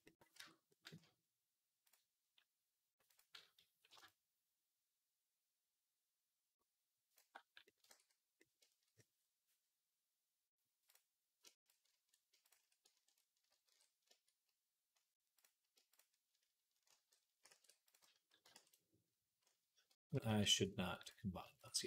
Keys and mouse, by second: 0.2 Tab, 1.7 click, 1.7-3.0 middle drag, 3.0-10.8 drag, 7.8 ctrl+s, 10.8 middle click, 11.4 shift+click, 11.6 ctrl+shift+middle click, 12.3 shift+click, 12.3-13.9 shift+middle drag, 13.5 ctrl+j, 16.8 ctrl+j, 17.3 ctrl+a, 18.4 ctrl+a, 19.7-20.9 ctrl+middle drag, 19.9 ctrl+z, 20.1 ctrl+z, 20.9 click, 20.9 shift+middle click, 21.5 click, 21.6 shift+middle click.